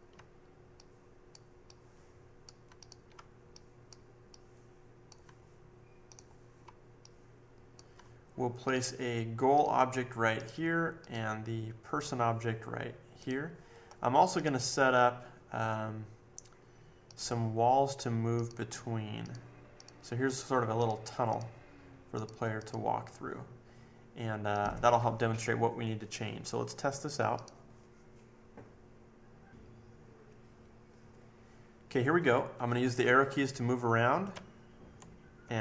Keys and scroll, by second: 34.3 Left, 34.7 Left, 34.9 Left, 35.4 Left.